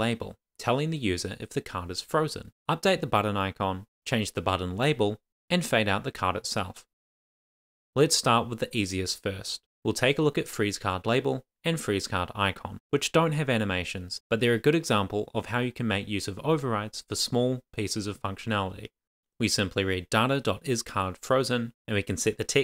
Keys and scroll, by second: 11.0 Return, 12.0 Tab, 12.3 shift+1, 12.9 Tab, 13.0 super+s, 14.8 shift+super+Left, 15.3 Down, 15.6 super+z, 15.9 Right, 16.1 Return, 16.4-17.9 typing, 18.4 Return, 19.3-21.9 typing, 19.8 Tab, 21.6 Right.